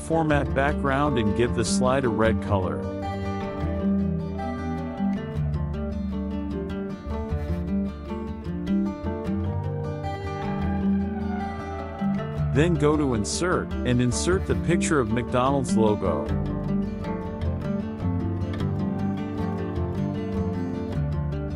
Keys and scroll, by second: 0.2 KP_Add, 2.4 KP_Subtract, 7.8 KP_Subtract, 18.1 KP_Subtract.